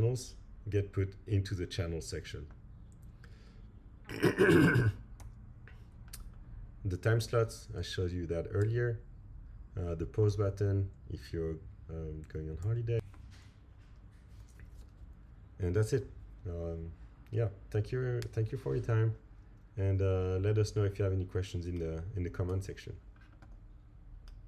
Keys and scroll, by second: 5.2 Right, 8.6 Right, 12.6 Right, 13.8 Left.